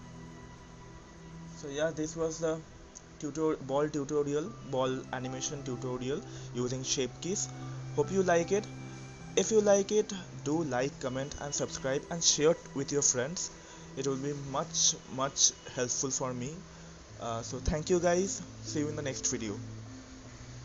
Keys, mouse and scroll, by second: 1.0 click, 18.8-20.2 drag.